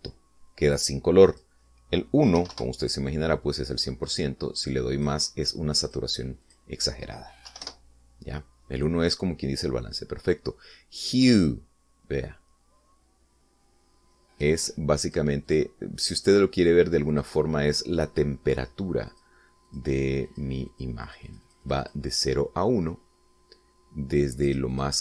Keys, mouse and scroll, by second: 3.3 1, 3.4 Return, 5.0-6.2 drag, 6.8 click, 7.3 click, 8.4 1, 8.5 Return, 12.3-15.5 drag, 15.9 click, 16.4 click, 17.1 click, 18.1 click, 18.6 click, 20.0 click, 20.6 click, 21.2 click, 21.6 click.